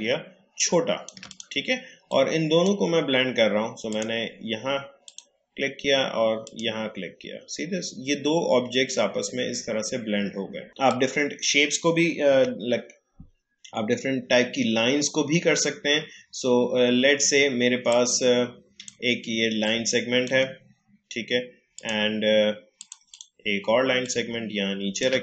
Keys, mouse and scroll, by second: 10.7-12.3 drag, 12.3 Delete, 17.9-25.2 drag.